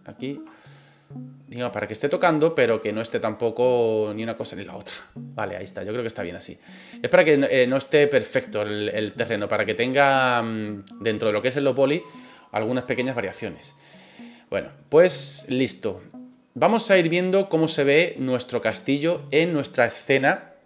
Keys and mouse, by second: 0.0 shift+right click, 0.6-1.8 drag, 2.0 middle click, 3.7 right click, 4.4-5.5 drag, 5.8 middle click, 6.4-7.5 middle drag, 8.3 right click, 8.9 click, 9.9-12.0 middle drag, 12.9 click, 14.5-15.3 middle drag, 16.3-18.2 middle drag.